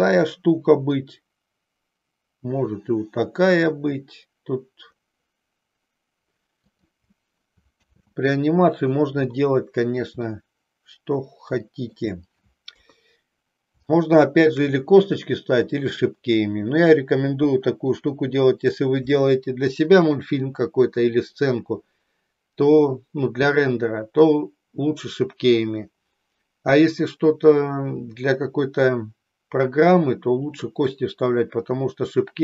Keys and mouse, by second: 7.9 ctrl+z, 10.4-12.0 middle drag, 12.8 KP_3, 13.9 shift+middle click.